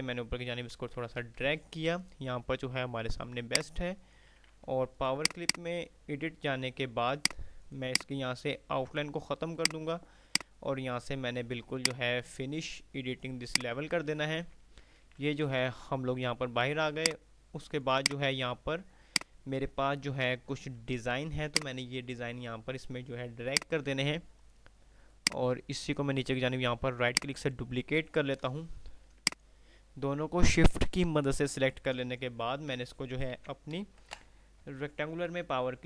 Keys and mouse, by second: 0.9 ctrl+r, 1.6 F3, 3.8-4.6 drag, 5.6 right click, 7.1 click, 9.8 right click, 11.8 right click, 13.6 click, 15.9 F3, 17.3 click, 21.1 F2, 21.8 click, 22.1-22.9 F2, 23.6-27.8 drag, 27.3 right click, 29.4 shift+click, 31.9 ctrl+g, 32.6 Delete, 33.4 z, 33.9 ctrl+z, 34.3 shift+Page_Down, 34.8 o.